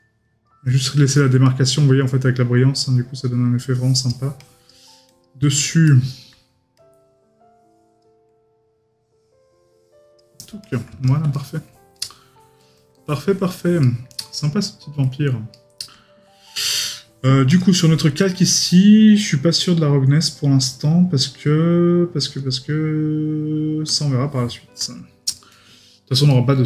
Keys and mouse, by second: 5.4 middle click, 11.3 right click, 13.2 right click, 15.5 middle click, 18.2 right click, 25.3 right click.